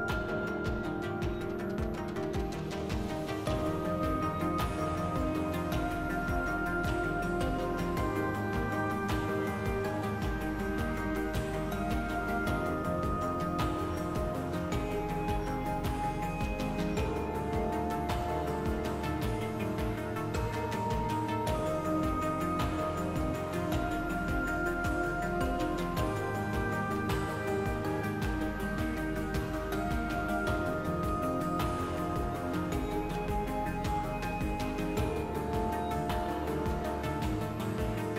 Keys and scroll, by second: 0.3 2, 1.5-3.0 typing, 8.5 2, 9.0 s, 11.6 4, 15.1 ctrl+z, 21.9-23.3 typing, 29.6 5, 33.7 s.